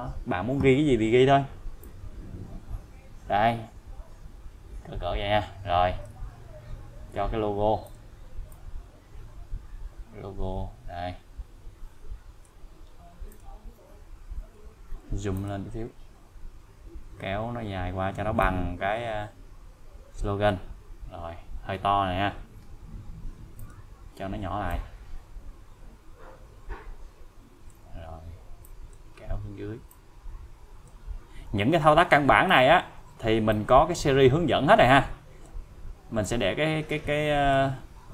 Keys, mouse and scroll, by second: 1.8-6.2 click, 6.9-7.5 scroll up 1, 7.9 click, 13.3 click, 15.4 click, 18.4-20.6 click, 23.6 click, 24.7-27.8 click, 28.6 click, 29.9-31.2 click, 32.5 click, 33.5-35.7 click.